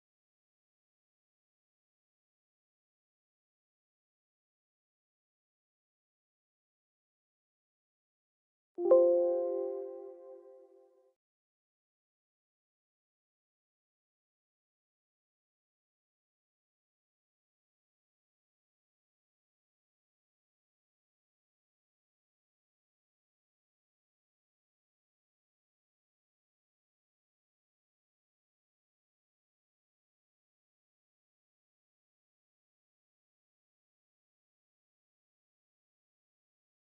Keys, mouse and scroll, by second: 1.3 ctrl+a, 3.4 click, 11.5 click, 17.1 click, 19.9 click, 24.1 click, 36.0-36.9 drag.